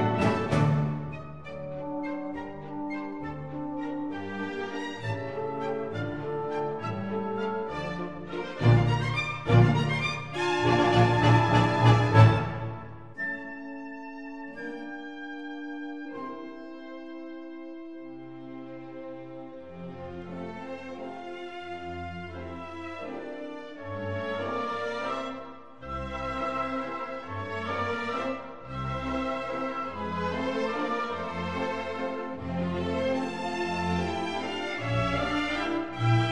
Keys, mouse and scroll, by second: 1.5-6.2 drag, 5.1 x, 6.4-7.5 middle drag, 7.5-8.5 drag, 7.9 x, 9.3 Tab, 10.9 Tab, 14.5-16.4 drag, 15.9 a, 17.3-20.8 drag, 20.1 Tab, 21.5-23.3 middle drag, 23.8-26.6 drag, 26.6 Tab, 29.3-31.3 drag, 34.5 KP_1.